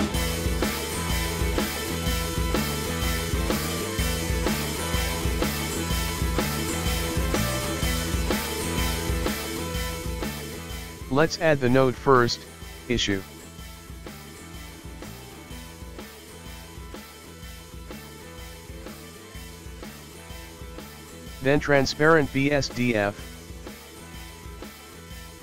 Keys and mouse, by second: 1.2 right click, 4.1 shift+a.